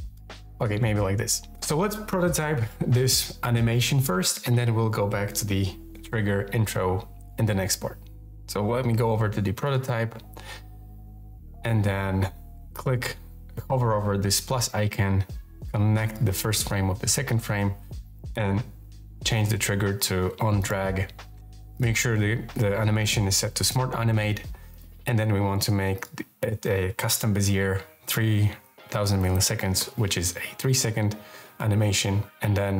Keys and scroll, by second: 28.3-29.7 typing.